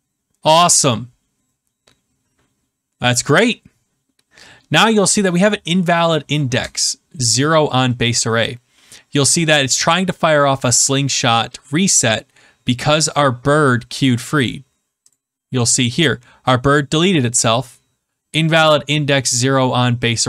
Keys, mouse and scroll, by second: 15.1 click.